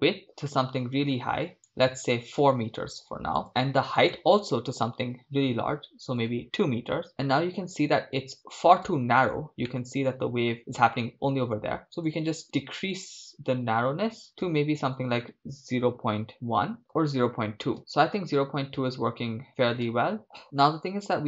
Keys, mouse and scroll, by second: 4.0-6.6 drag, 7.1 shift+space, 8.9 shift+space, 9.7-10.6 middle drag, 12.0-16.8 drag, 17.8 shift+space, 19.8 shift+space.